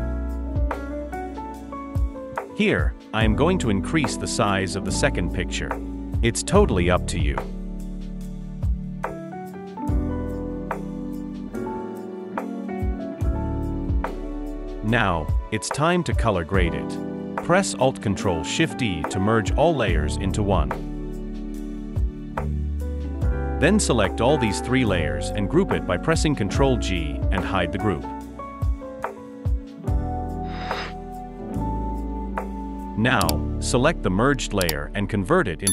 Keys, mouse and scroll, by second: 10.5 ctrl+t, 13.6 alt+shift+click, 20.6 ctrl+alt+shift+e, 27.6 shift+click, 29.3 ctrl+g, 33.6 right click.